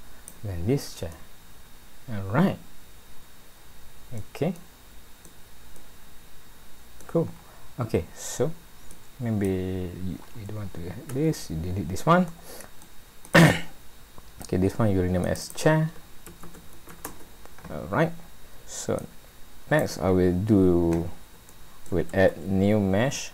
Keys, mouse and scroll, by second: 0.8-1.4 scroll down 5, 1.1 middle click, 4.6 middle click, 5.8 middle click, 7.4-7.9 scroll down 2, 8.9 click, 11.1 Delete, 12.3 middle click, 13.3 click, 15.2 click, 15.4 click, 19.0 click, 20.3-20.6 scroll up 1, 21.5 shift+middle click, 22.3 a.